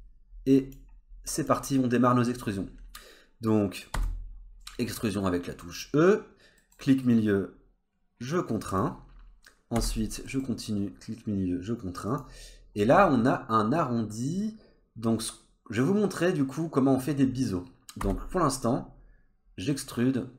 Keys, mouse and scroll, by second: 0.6 click, 0.9-1.3 scroll up 2, 1.3 click, 2.3 scroll up 1, 3.9 e, 9.8 e, 14.3-17.4 scroll up 1, 18.0 e.